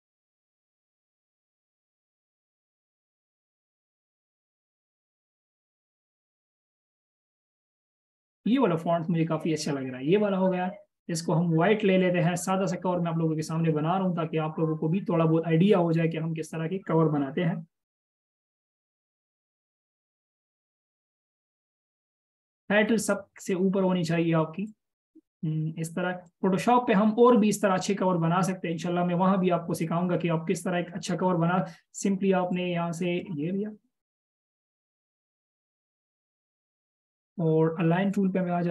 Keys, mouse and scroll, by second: 21.6 alt+shift+click, 25.1 alt+shift+click, 27.4-27.8 alt+shift+scroll up 1, 32.9 alt+shift+click.